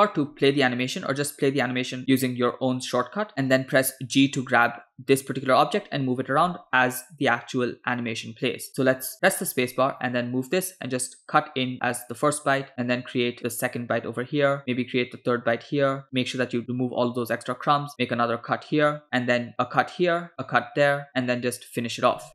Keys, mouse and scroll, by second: 9.3 space, 9.8 g.